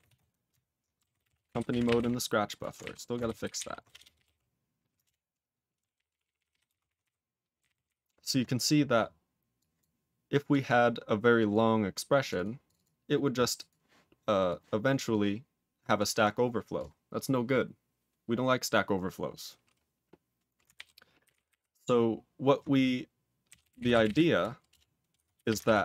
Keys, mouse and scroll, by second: 0.0-0.5 typing, 5.0 ctrl+Return, 5.7 ctrl+a, 5.9 ctrl+p, 6.1 ctrl+p, 6.2 ctrl+p, 6.3 ctrl+p, 6.5 ctrl+p, 6.6 ctrl+space, 6.7 ctrl+n, 7.5 ctrl+n, 7.6 ctrl+e, 7.7 ctrl+n, 7.8 ctrl+n, 9.5 click, 9.7 click, 10.6 click, 11.3 click, 11.5 click, 12.2 click, 12.3 double click, 12.6 click, 12.7 double click, 13.5 click, 14.4 click, 14.8 click, 15.0 click, 15.9 click, 16.2 click, 16.7 click, 20.7 ctrl+n, 21.2 ctrl+o, 21.3 ctrl+n, 21.4 ctrl+o, 23.2-25.8 typing, 24.7 Return, 25.6 ctrl+d.